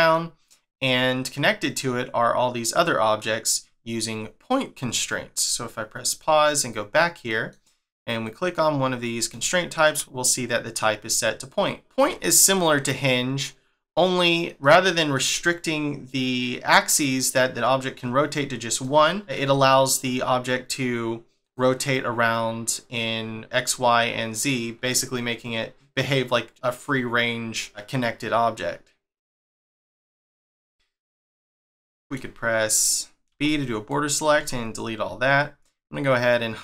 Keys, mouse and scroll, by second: 0.1 middle click, 6.1 click, 6.6 click, 7.3 middle click, 8.2 click, 8.9-9.4 scroll up 1, 9.4 shift+middle click, 11.7 scroll down 1, 11.9 shift+middle click, 14.6 middle click, 17.0 middle click, 18.8 middle click, 21.4 click, 23.3 scroll up 1, 25.0 scroll up 1, 25.7 scroll up 1, 26.4 scroll down 2, 30.6 click, 31.2 click, 31.9 shift+middle click, 33.3 b.